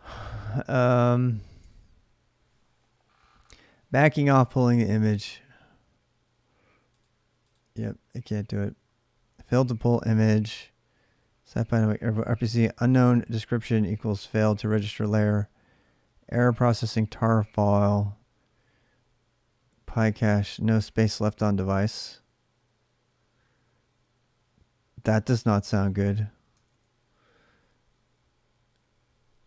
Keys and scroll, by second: 0.0-1.0 typing, 0.5 ctrl+[, 0.8 ctrl+j, 1.4 alt+Tab, 26.3 alt+Tab.